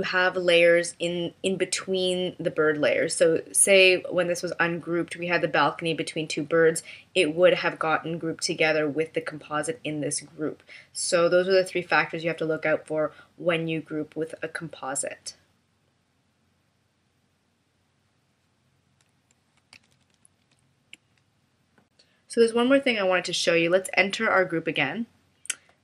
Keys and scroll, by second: 19.7 super+-.